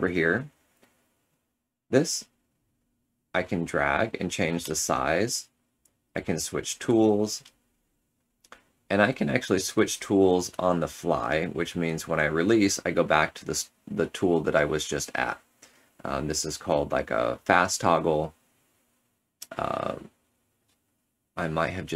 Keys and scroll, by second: 0.6 ctrl+z, 6.7 2, 8.1 3, 10.4 4, 15.2 ctrl+z, 15.7 ctrl+z, 16.5 ctrl+z, 17.2 ctrl+z, 17.9 ctrl+z.